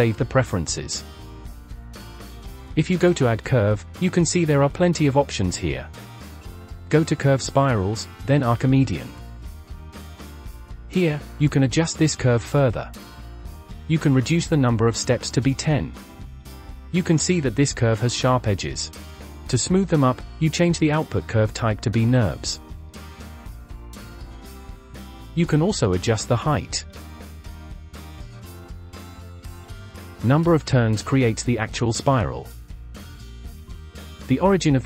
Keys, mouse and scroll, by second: 2.6-4.6 drag, 10.1-10.9 scroll up 6, 10.9-13.5 drag, 14.0-16.6 drag, 21.9 click, 23.9-24.3 scroll down 5, 24.3-24.9 middle drag, 24.9-26.2 scroll up 1, 26.2-28.8 drag, 30.8 click, 31.7-32.6 scroll down 5, 32.6 shift+middle click, 32.6-33.6 scroll up 1, 33.8 click, 34.3-34.7 scroll down 1, 34.7 middle click.